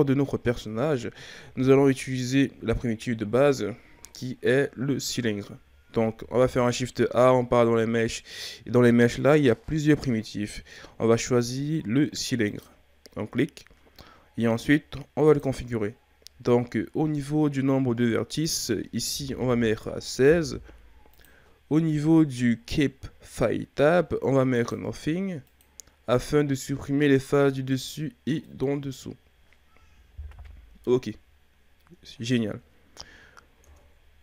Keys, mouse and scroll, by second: 0.9-1.7 scroll up 3, 1.7-4.8 scroll down 2, 6.0 shift+a, 15.3-21.3 drag, 24.5-27.2 drag, 27.2-27.7 middle drag, 27.7-28.5 scroll up 3, 28.5-30.3 middle drag, 30.3 KP_1, 33.6 Tab.